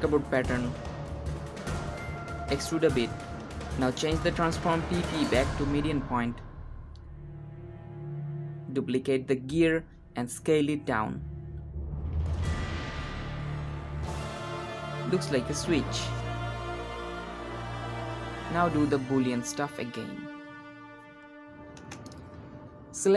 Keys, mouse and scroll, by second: 0.8 shift+z, 1.3 shift+click, 1.6 shift+z, 2.2 e, 3.8 Tab, 4.0 scroll down 1, 4.1-6.2 drag, 6.2-6.7 scroll down 1, 6.7 click, 7.6 shift+d, 10.6 s, 13.3 g, 14.4 s, 16.2 s, 18.7-20.9 drag, 20.9 scroll up 1, 21.1 click, 21.6 s, 22.5 Tab.